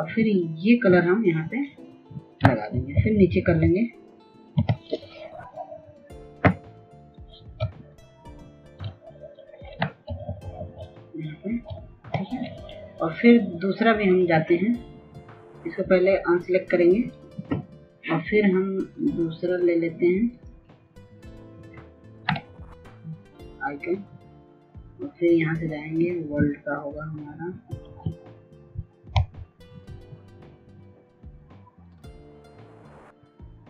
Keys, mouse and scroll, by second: 7.0 Down, 7.3-7.6 typing, 11.3 click, 12.3 ctrl+click, 14.3-14.6 typing, 15.7-17.4 typing, 18.3 click, 20.8-33.6 drag.